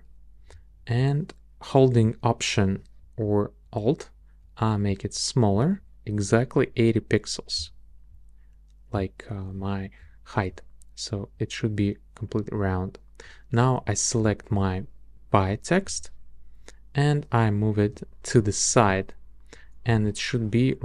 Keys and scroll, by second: 15.9 shift+Right, 20.0 shift+Right.